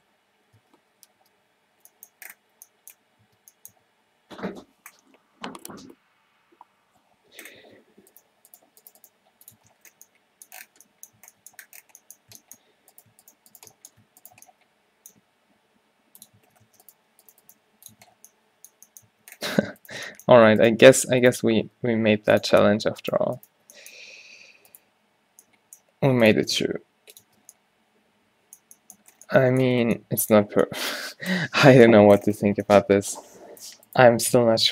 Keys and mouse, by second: 1.5 ctrl+shift+z, 3.3 Tab, 4.2 Tab, 7.8 Tab, 8.7 g, 9.1 g, 9.7 Tab, 11.3 Tab, 14.4 shift+right click, 15.3 g, 16.5 Tab, 16.8 Tab, 17.0 g, 17.7 g, 18.1 Tab, 20.0 Tab, 20.7 shift+right click, 21.8 g, 24.1 q, 25.9 g, 27.2 g, 27.4 Tab, 30.7 a, 31.1 a, 34.0-34.7 drag, 34.5 Tab.